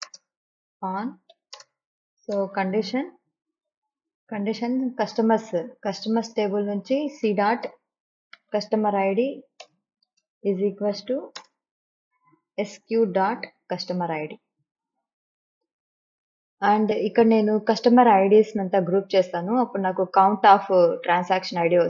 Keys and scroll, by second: 0.2 space, 1.1 o, 1.4 n, 1.7 space, 2.5 Return, 7.4-11.5 typing, 9.7 Return, 12.8 s, 13.2 q, 13.9 ..